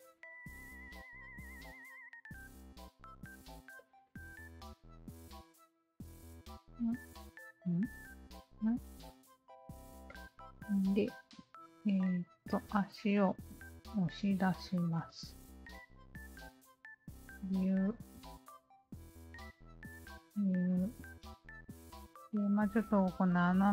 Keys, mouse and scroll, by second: 3.8 alt+click, 4.5 alt+click, 5.4 r, 6.1-7.3 alt+drag, 7.7 ctrl+z, 8.2 click, 9.1 alt+click, 10.0 alt+click, 11.2 3, 11.7 alt+click, 12.7 alt+click, 13.3 alt+click, 13.9 alt+middle click, 14.7 shift+q, 15.8 alt+click, 17.1 alt+click, 18.4 alt+click, 19.2 w, 19.9 alt+click, 21.2 alt+click, 21.6 alt+middle click, 22.0 alt+right click, 22.4 alt+middle click, 22.7 alt+right click, 23.2 alt+middle click.